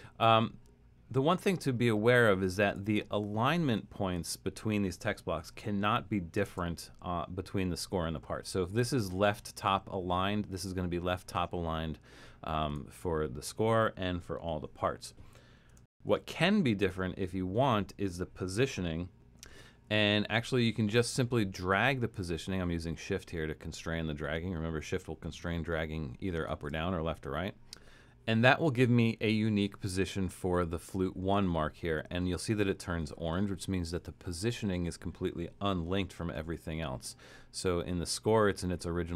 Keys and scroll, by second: 6.5 shift+Return, 16.0 alt+super+., 19.4 super+=, 19.9 super+=, 36.6 alt+super+,.